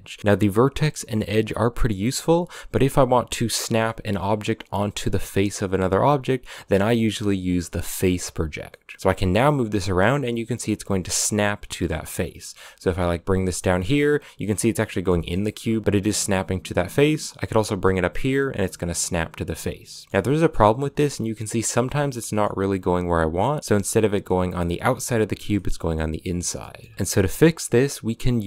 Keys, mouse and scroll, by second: 0.0 middle click, 0.2 g, 8.5-8.9 middle drag, 8.9 g, 11.9 scroll down 1, 12.0 middle click, 12.4 g, 13.4-15.4 middle drag, 15.4 g, 15.8 g, 18.2 middle click, 18.5 g, 19.7 middle click, 19.9 scroll up 2, 20.1 g, 21.9-22.3 middle drag, 22.3 g, 25.2-28.4 shift+middle drag.